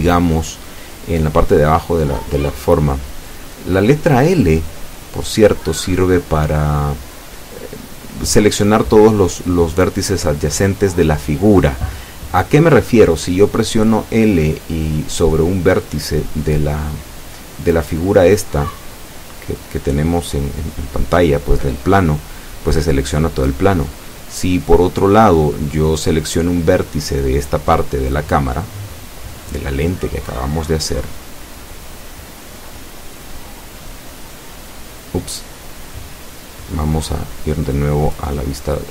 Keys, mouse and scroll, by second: 2.5 ctrl+r, 3.7 click, 9.0 click, 11.4 l, 12.9 l, 29.4 scroll down 2, 30.5 scroll down 2, 32.9 scroll up 2.